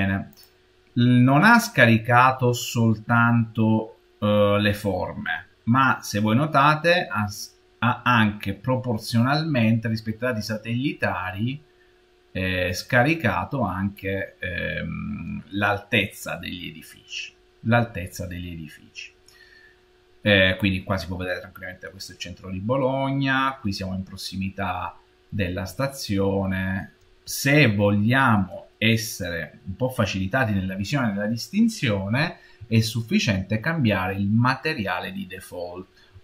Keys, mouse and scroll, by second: 0.2 click, 1.1 middle click, 1.6-4.1 middle drag, 5.3-10.1 middle drag, 5.3-7.1 scroll up 8, 16.1-17.3 scroll down 3, 17.3-18.5 scroll down 2, 18.5-19.1 scroll down 2, 19.1-22.0 middle drag, 22.0-22.6 scroll up 4, 22.1-24.4 middle drag, 24.4-25.7 scroll down 2, 25.7-30.3 shift+middle drag, 35.0-36.2 middle drag.